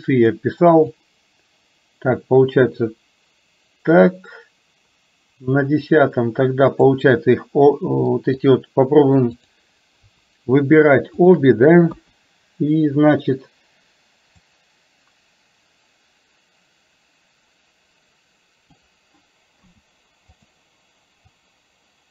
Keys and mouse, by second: 1.0-5.6 drag, 8.1 middle click, 9.3 click, 12.0 KP_1, 14.4-18.8 drag, 19.6 i, 21.5-22.1 drag.